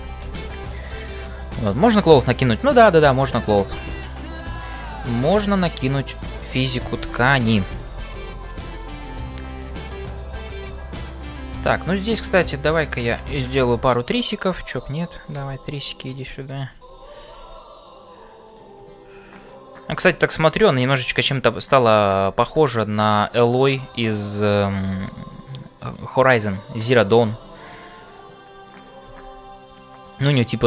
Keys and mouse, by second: 0.0-30.6 typing, 0.4 middle click, 2.6 middle click, 8.2 click, 8.3 middle click, 12.6 click, 19.4 click, 28.7 click.